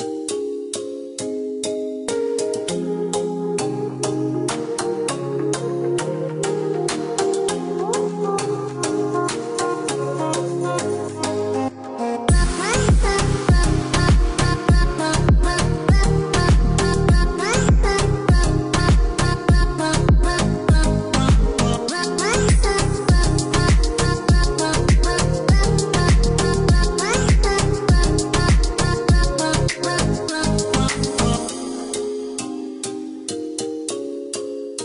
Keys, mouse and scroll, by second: 2.7 click, 4.9 click, 5.7 click, 7.5 click, 8.1 click, 9.1 KP_5, 9.5 KP_Enter, 10.2 Escape, 12.9 click, 19.3 click, 20.8 click, 23.5 click, 30.1 click, 31.0 click, 31.7 click, 32.5 KP_2, 32.8 KP_Enter, 33.5 Escape.